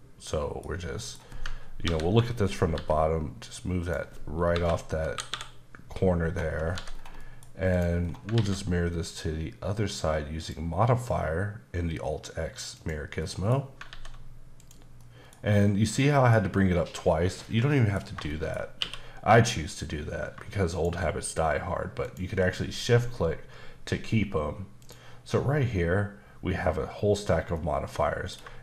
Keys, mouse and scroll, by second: 0.6-1.0 scroll up 1, 1.0 middle click, 1.8 ctrl+KP_7, 2.7 g, 3.8 click, 4.5 KP_8, 5.2 KP_8, 5.3 KP_7, 6.3-6.7 scroll up 1, 6.7 h, 6.9 scroll down 2, 7.2 middle click, 7.7 click, 8.0 scroll down 2, 8.3 alt+x, 10.4 click, 12.7 click, 13.2 middle click, 13.9 alt+x, 14.6 click, 15.0 middle click, 16.1 middle click, 17.4 middle click, 18.3 shift+middle click, 18.8 q, 20.7 shift+click, 24.8 click, 27.6 middle click.